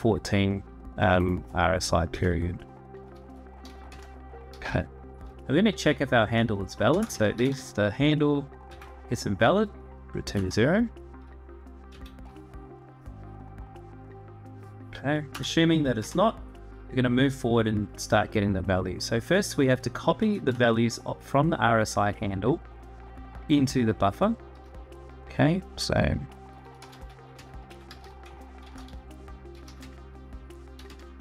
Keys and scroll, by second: 1.9 Return, 3.4 /, 3.7 space, 6.4-7.7 typing, 8.7 Tab, 10.1 Return, 11.6 Tab, 15.1 Return, 15.4 /, 15.7 space, 20.0 Tab, 20.3 Return, 26.3-30.6 typing.